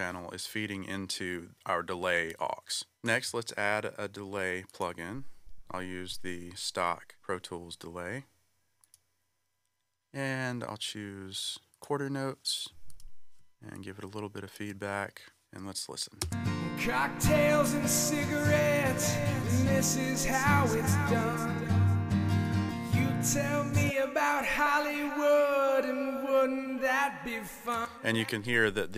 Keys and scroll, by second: 16.2 space, 27.7 space.